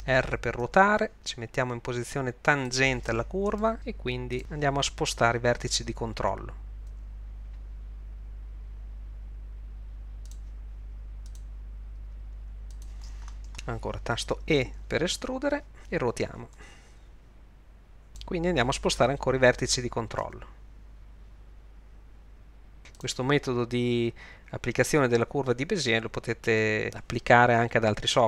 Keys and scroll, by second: 0.6 r, 6.9 g, 12.0 g, 14.6 e, 16.6 r, 20.2 g, 24.9 g.